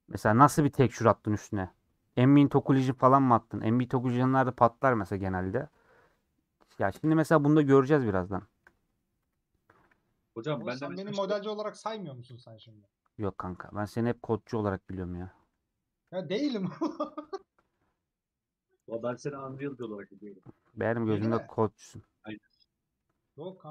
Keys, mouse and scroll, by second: 7.4 scroll down 3, 7.5 middle click, 8.0 scroll up 1, 8.1-9.1 middle drag, 9.1 KP_Decimal, 10.2-12.2 middle drag, 12.2 h, 12.6-13.8 middle drag, 13.8 click, 14.5 /, 14.8 middle click, 15.3 /, 15.6 scroll down 1, 15.9-19.4 middle drag, 19.4 Tab, 19.7 click, 20.6 KP_Decimal, 22.1 click, 22.6-23.7 middle drag.